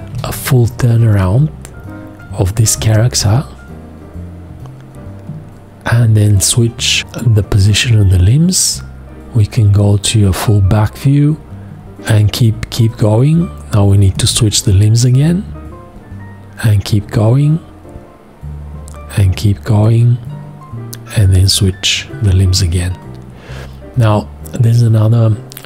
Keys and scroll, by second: 0.1 g.